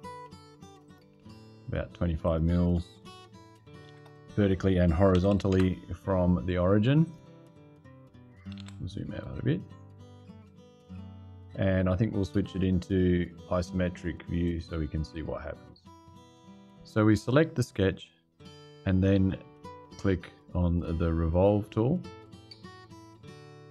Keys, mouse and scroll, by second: 0.6 click, 2.0 click, 3.6 shift+h, 4.9 KP_2, 5.1 KP_5, 5.3 KP_Enter, 6.8 click, 8.1-8.9 typing, 14.9 click, 17.5 click, 22.1 click.